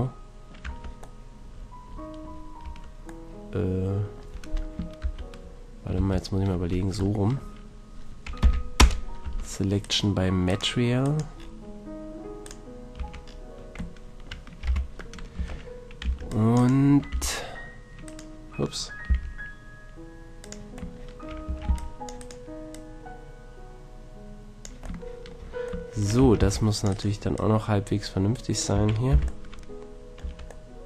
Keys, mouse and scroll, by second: 0.6 Tab, 1.0 shift+middle click, 1.2 middle drag, 1.5-2.1 middle drag, 2.6 Tab, 3.3-5.0 middle drag, 5.0 ctrl+KP_1, 6.0 ctrl+KP_3, 8.4 p, 9.2 Tab, 9.8 click, 12.8 click, 13.0 Tab, 14.6 z, 15.3 a, 16.0 c, 16.6-19.9 right drag, 17.1 r, 19.0 g, 20.4-22.4 drag, 21.4 a, 21.6 c, 22.7-24.6 drag, 26.2 a, 26.4 c, 27.1-28.7 drag, 27.3-28.7 right drag, 28.7 a, 29.1 z, 30.2 Tab.